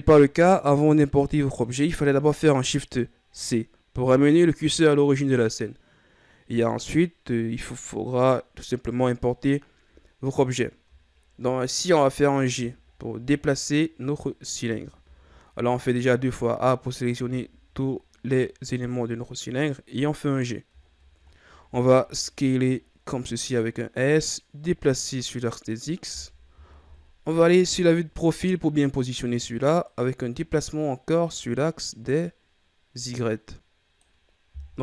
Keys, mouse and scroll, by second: 9.9-11.1 ctrl+scroll up 1, 11.1-12.4 shift+scroll down 3, 12.4 d, 14.0 right click, 14.6 a, 15.0 a, 17.1 g, 20.7-21.3 shift+scroll down 6, 21.3-21.6 ctrl+scroll up 1, 21.6 s, 24.2-26.8 drag, 26.8 KP_3, 28.5-28.9 scroll up 2, 29.8-32.8 drag, 34.7 KP_1.